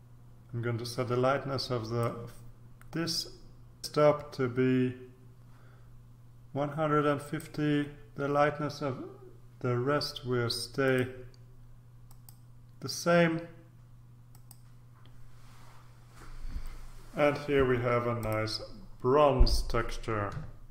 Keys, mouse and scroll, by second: 7.2 click, 10.8 click, 12.1 click, 14.3 click, 18.2 click.